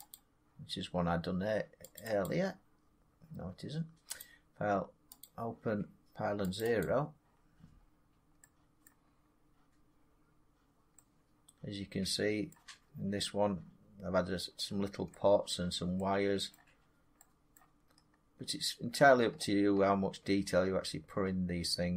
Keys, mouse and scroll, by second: 0.0 click, 1.9 click, 2.1 click, 4.1 click, 5.1 click, 6.5 click, 6.7 click, 7.7 middle click, 7.8 middle click, 8.8 middle click, 9.0 middle click, 9.0 middle click, 11.4 scroll down 2, 12.0 scroll up 1, 12.4 middle click, 12.8-15.0 middle click, 12.8 scroll, 13.2 scroll up 3, 13.5 scroll down 4, 14.5 scroll up 5, 15.4 middle click, 16.4 middle click, 16.6 middle click, 16.7 middle click, 16.7 scroll down 4, 17.1 scroll up 6, 17.4 scroll, 17.8-18.9 scroll down 16, 18.9-20.3 scroll up 28, 21.1 scroll.